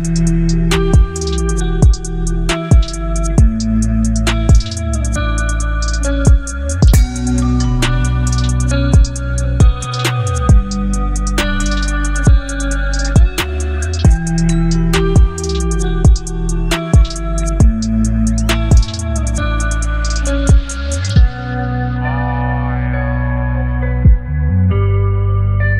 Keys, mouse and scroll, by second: 5.9-7.3 alt+scroll down 4, 7.3 space, 7.3-8.9 click, 7.8 space, 11.0 click, 14.8-16.6 drag, 23.3 click.